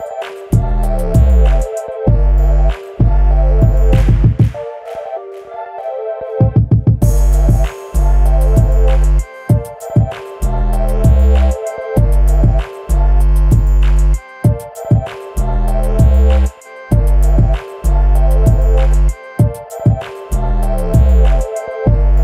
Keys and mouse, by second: 0.6 click, 1.3-2.0 drag, 2.3 ctrl+z, 2.8 middle drag, 4.2-4.5 drag, 5.3-6.5 drag, 6.7-7.0 middle drag, 7.4 KP_1, 10.7 click, 11.5 click, 13.2-13.7 middle drag, 14.4 click, 16.4 click, 20.3-21.0 drag, 21.4 click.